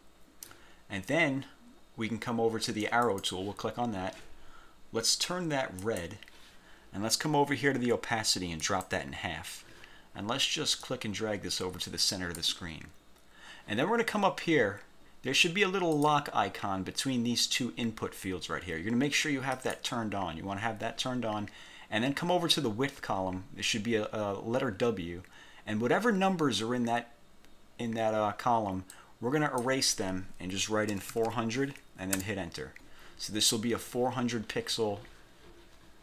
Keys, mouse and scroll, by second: 3.2 click, 6.0 click, 8.8 click, 11.0-12.7 drag, 16.1 click, 19.6 click, 29.0 click, 30.8-31.7 typing, 32.2 Return.